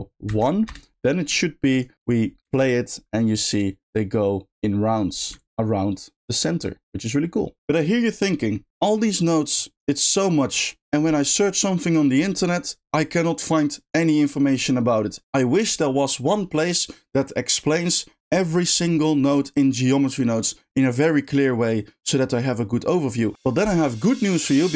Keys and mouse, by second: 1.8 click, 2.0 click, 2.4 space, 5.3 ctrl+click, 8.3 middle click.